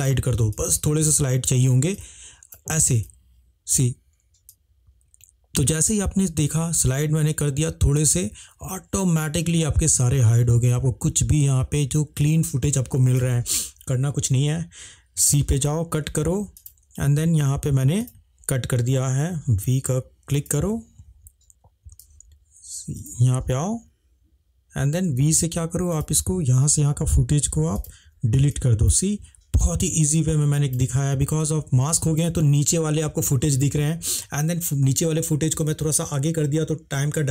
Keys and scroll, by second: 15.4 c, 19.4 v, 22.1 c, 25.1 v, 26.7 Delete.